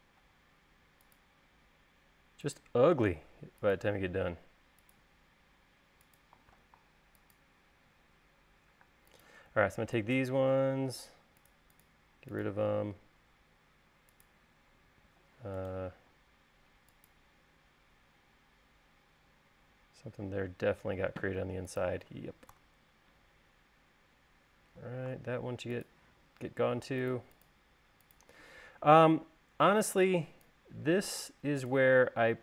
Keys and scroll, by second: 0.4 l, 3.1 l, 8.0 e, 9.0 space, 22.7 BackSpace, 29.8 e, 31.1 l.